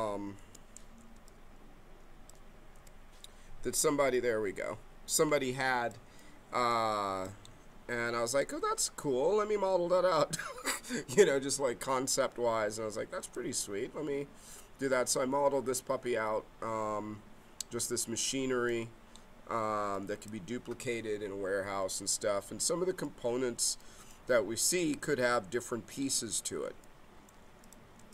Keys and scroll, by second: 0.4 5, 2.7 7.